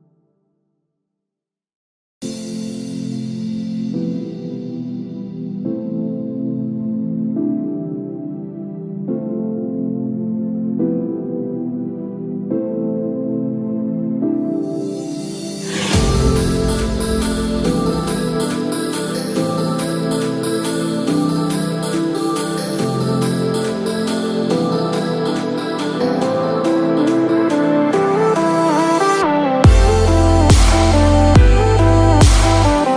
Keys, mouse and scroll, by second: 0.6 middle click, 1.5 click, 1.8 middle click, 3.0 scroll down 2, 3.2 middle click, 4.1-4.4 scroll up 3, 4.4 shift+middle click, 4.8 middle click, 7.0 click, 8.1 click, 9.3 ctrl+j, 10.5 click, 11.0 click, 11.3 shift+click, 16.5 middle click, 24.8 g, 28.1 middle click, 28.1 scroll down 1, 29.6-30.4 scroll down 1, 30.4 shift+middle click, 30.8 middle click, 32.1 shift+middle click, 32.5 middle click.